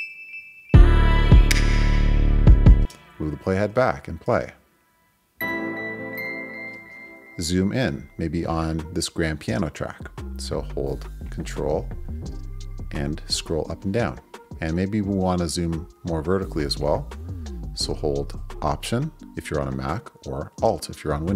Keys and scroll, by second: 2.8 space, 3.0 Left, 4.3 space, 6.7 space.